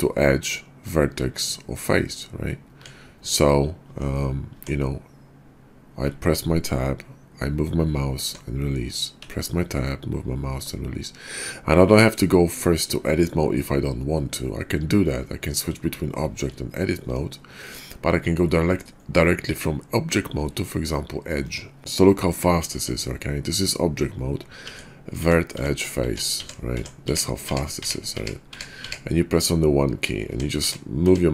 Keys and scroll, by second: 3.8 Tab, 4.4 Tab, 6.1 Tab, 9.1 Tab, 13.0 Tab, 16.3 Tab, 18.6 Tab, 20.3 Tab, 21.8 Tab, 22.7 Tab, 24.6 Tab, 25.1 Tab, 25.6 Tab, 26.0 Tab, 26.4 Tab, 26.8 Tab, 27.1 Tab, 27.5 Tab, 27.8 Tab, 28.2 Tab, 28.5 Tab, 28.9 Tab, 30.3 Tab, 30.6 Tab, 31.0 Tab.